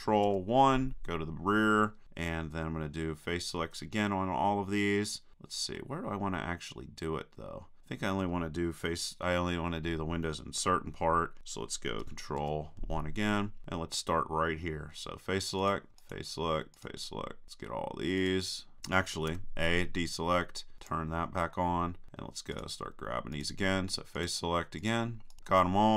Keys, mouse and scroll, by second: 0.3 ctrl+KP_1, 5.8-7.6 middle drag, 12.4 ctrl+KP_1, 15.6-18.9 drag, 19.3 a, 19.7-20.8 middle drag, 22.5-25.9 drag.